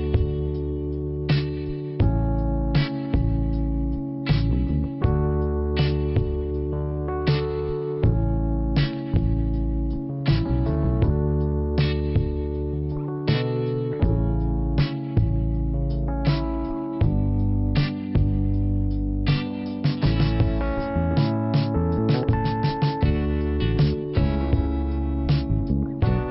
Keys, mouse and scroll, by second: 2.8 p, 5.0 scroll down 1, 6.4 click, 8.4 click, 11.2 click, 11.7 click, 12.6 click, 14.7 click, 17.4 click, 18.1 click, 21.1 click, 21.9 click, 23.4 click, 26.1 click.